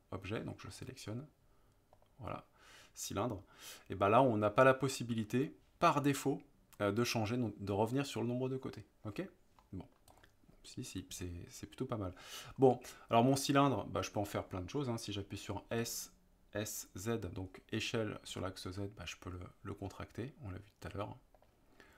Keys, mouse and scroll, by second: 1.9 click, 9.1 click, 9.7-10.0 middle drag, 10.1 click, 15.7 s, 18.3 z, 21.3 click.